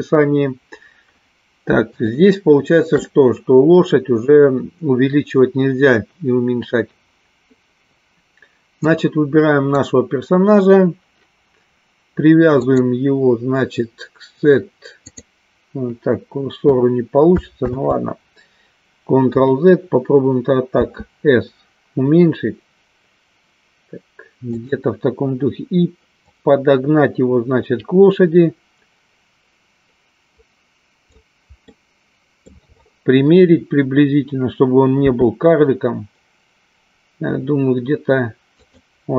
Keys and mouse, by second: 2.0-3.0 shift+middle drag, 8.9-9.9 drag, 12.6-15.5 drag, 18.5 ctrl+z, 26.4-31.4 drag, 31.7 middle click.